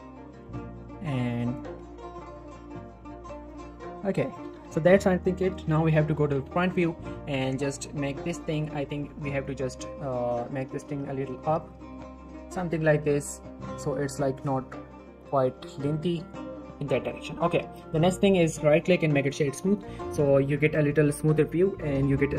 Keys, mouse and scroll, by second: 0.4 click, 0.6 shift+middle click, 0.8-1.4 scroll down 1, 1.4 click, 1.8 typing, 2.8 click, 3.7-4.4 typing, 4.2 click, 4.6 Tab, 4.8-5.5 scroll down 1, 6.0 scroll up 1, 6.2 Tab, 6.3 z, 6.6 shift+middle click, 7.1-8.1 shift+scroll up 2, 8.1-8.6 click, 9.1-9.6 shift+click, 10.1-10.6 click, 10.6 g, 10.8 z, 11.6 click, 11.8 z, 11.9 Tab, 12.1 scroll down 1, 12.7 Tab, 13.0 z, 13.6 scroll up 1, 13.8 g, 14.0 z, 14.3 click, 14.5 z, 14.6 scroll down 1, 15.2 Tab, 16.2 scroll down 1, 16.3-17.0 middle click, 17.5 scroll up 1, 17.8 scroll down 1, 17.9 middle click, 18.0-18.6 scroll up 1, 18.6 right click, 19.3 click, 19.7 scroll down 1, 20.0-20.3 middle click, 20.4 click, 20.6 middle click, 20.7-21.1 scroll up 1, 21.1 middle click.